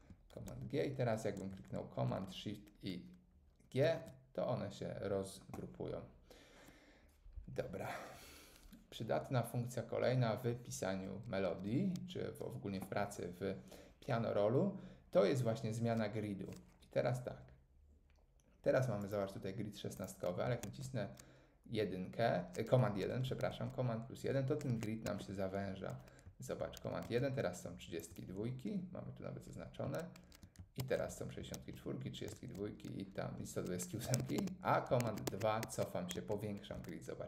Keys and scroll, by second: 3.8 shift+super+g, 20.6 super+1, 23.5 super+1, 24.7 super+2, 27.0 super+1, 30.8 super+1, 31.5 super+1, 33.3 super+1, 34.2 super+2, 35.1 super+2.